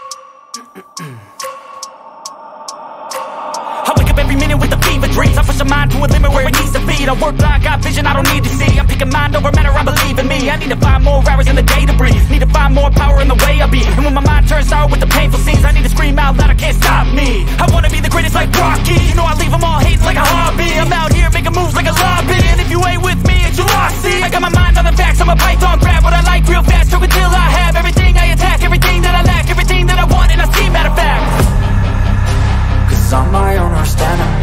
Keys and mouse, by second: 1.7 click, 3.3 click, 5.5 click, 6.3 click, 6.9 click, 10.0 click, 10.7 middle click, 12.4-13.7 middle drag, 13.7 click, 13.7 KP_0, 17.1-18.4 middle drag, 26.1 click, 26.1 KP_0, 26.3 KP_0, 30.9 click, 32.3-33.5 drag, 33.9-34.4 drag.